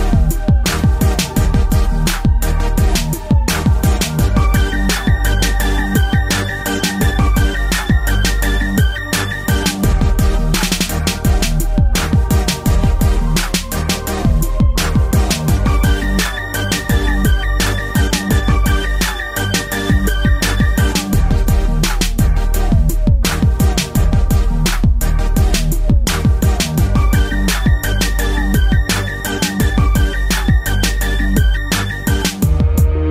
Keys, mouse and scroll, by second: 2.4 a, 2.9 a, 5.0 b, 5.8 click, 8.9 typing, 9.4 click, 11.0 click, 11.1 click, 11.5 click, 22.9 scroll up 2, 23.9 scroll up 1, 24.3 middle click, 24.5 middle click, 24.7-25.3 typing, 25.3 click, 26.1 scroll up 2, 26.6 scroll down 1, 27.1-29.0 typing, 27.4 click, 28.5 click, 29.2 middle click, 29.7-30.1 scroll down 2, 31.8 click.